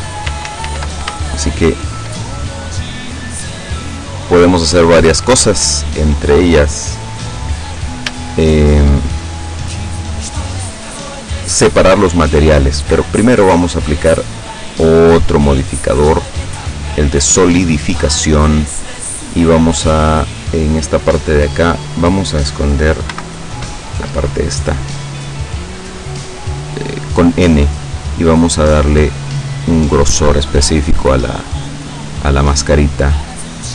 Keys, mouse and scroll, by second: 0.5 ctrl+z, 1.4 shift+click, 2.3-2.6 shift+scroll down 3, 2.9-3.9 drag, 8.4 shift+click, 9.5 middle click, 10.0-12.9 middle drag, 14.5 click, 16.6 click, 23.2 n, 25.6-27.6 drag, 29.2 scroll down 1, 29.5-31.0 middle drag, 31.4-33.7 middle drag.